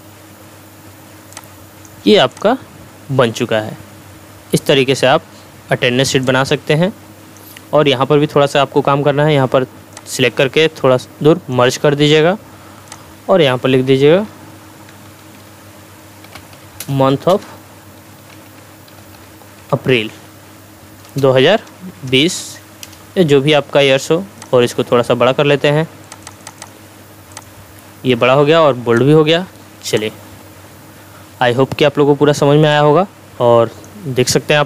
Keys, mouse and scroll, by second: 1.7 click, 6.3-7.5 drag, 9.9-11.8 drag, 14.6-21.0 typing, 24.4 click, 32.7-33.9 drag.